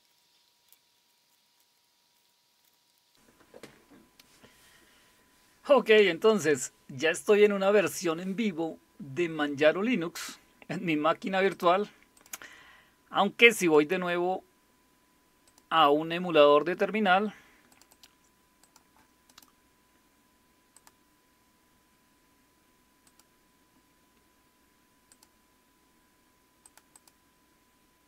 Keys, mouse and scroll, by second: 11.5 click, 12.2 click, 13.6 click, 15.4 click, 17.7 click, 17.9 click, 18.6 click, 19.3 right click, 20.7 click, 23.0 click, 25.1 click, 26.6 click, 27.0 click.